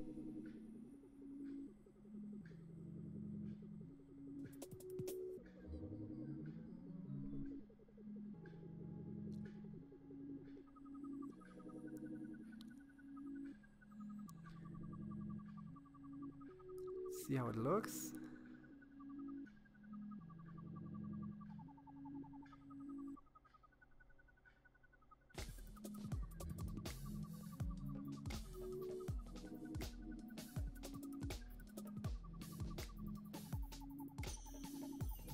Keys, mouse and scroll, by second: 8.4-10.0 shift+middle drag, 11.2-11.9 scroll down 3, 11.9-13.5 middle drag, 13.5 shift+z, 14.1-14.9 scroll down 7, 14.9-16.4 middle drag, 18.2 KP_7, 19.0-19.6 scroll up 6, 19.6-20.8 shift+middle drag, 20.8-21.9 scroll up 1, 21.9 c, 30.2-31.4 scroll up 2, 31.4 scroll up 1, 31.7 c.